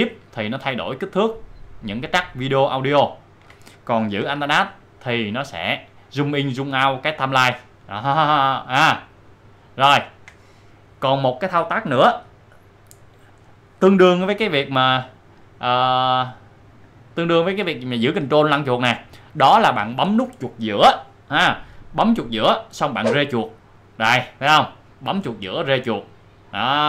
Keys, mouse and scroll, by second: 0.0 shift+scroll up 1, 1.0 shift+scroll down 1, 1.4-2.6 shift+scroll up 1, 3.6-4.0 shift+scroll down 1, 4.2 shift+scroll down 1, 4.7 alt+scroll down 1, 6.3 alt+scroll down 1, 10.3 alt+scroll up 1, 14.4-14.9 alt+scroll up 2, 19.8-20.5 ctrl+scroll down 1, 23.0-26.8 middle drag.